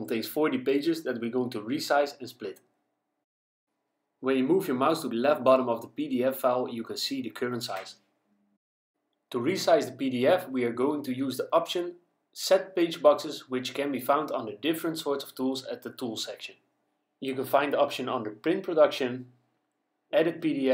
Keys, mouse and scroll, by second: 12.3 click.